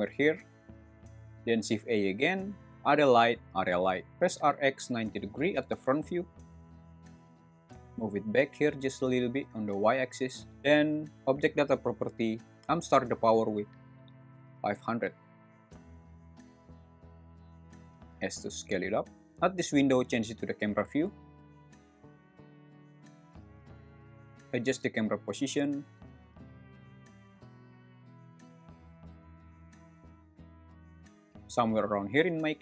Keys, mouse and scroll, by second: 1.2 shift+a, 4.1-5.1 typing, 5.5 Return, 6.6 `, 7.6 g, 9.4 y, 12.5 click, 13.4 click, 14.4 0, 18.1 s, 19.2 `, 20.1 `, 21.9 `, 23.1 `, 23.7 g, 24.0 z, 25.3 `, 26.2 g, 26.4 y, 29.2 click, 29.4 `, 29.9 g, 30.2 z.